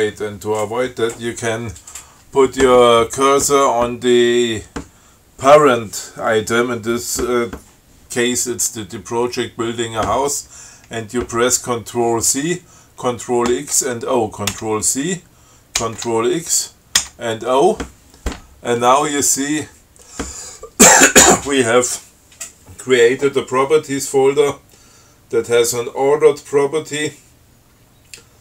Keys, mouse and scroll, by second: 14.8 ctrl+c, 16.1 ctrl+x, 17.3 o.